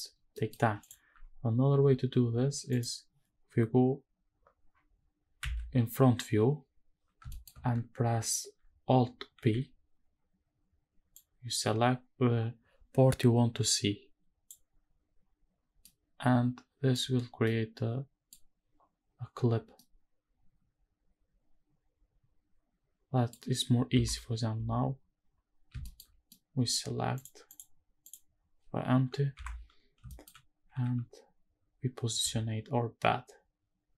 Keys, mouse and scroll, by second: 0.3 middle click, 0.8 click, 2.4 alt+h, 2.7 click, 5.4 KP_1, 6.7-7.6 scroll up 4, 7.3 shift+middle drag, 9.3 alt+b, 15.8-16.9 middle drag, 17.1-17.4 scroll down 1, 17.4-18.3 middle drag, 19.5 scroll down 3, 19.8-23.3 middle drag, 23.9 KP_7, 24.6-25.7 scroll up 4, 25.8 shift+middle drag, 26.3-26.7 middle drag, 27.2 click, 27.5 click, 28.0 click, 29.3 KP_7, 30.0 scroll down 1, 30.1 shift+middle drag, 30.7 g.